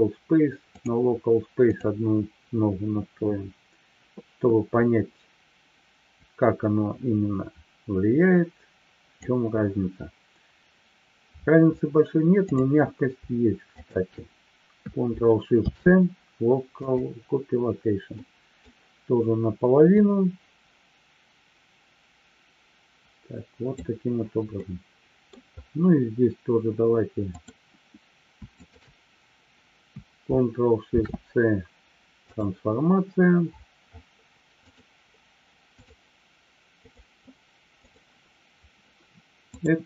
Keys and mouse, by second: 0.8-2.1 drag, 6.2-9.3 drag, 13.8-14.3 shift+drag, 15.5 ctrl+shift+c, 18.1-18.6 middle drag, 19.9-23.8 drag, 24.6 middle click, 30.8 ctrl+shift+c, 34.7-36.2 drag, 36.9-38.3 drag, 39.5-39.8 drag.